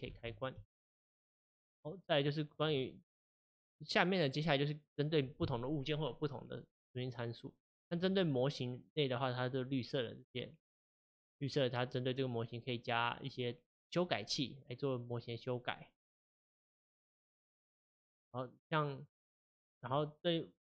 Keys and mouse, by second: 0.2 n, 0.5 n, 1.7 click, 2.7-3.8 drag, 8.0-11.0 drag, 11.4 click, 16.8 click, 17.7 click, 19.0 click.